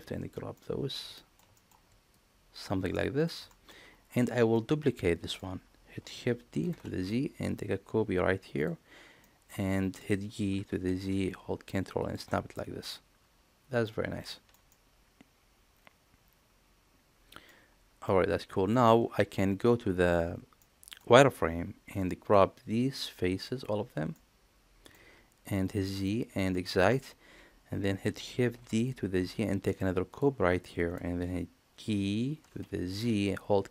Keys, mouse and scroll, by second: 0.5 middle click, 1.1 shift+middle click, 1.5 middle click, 2.1 shift+click, 2.9 middle click, 3.4 shift+middle click, 4.5-5.3 middle drag, 6.5 shift+d, 9.2 middle click, 9.7 shift+click, 10.5 g, 12.8-13.8 middle drag, 14.3 shift+middle click, 14.6-17.4 middle drag, 18.0 middle click, 18.9 alt+z, 19.8 alt+z, 20.5 middle click, 21.2 z, 22.0-23.4 drag, 24.1 middle click, 25.0 z, 26.0 middle click, 26.6 shift+middle click, 28.4 shift+d, 32.2 g.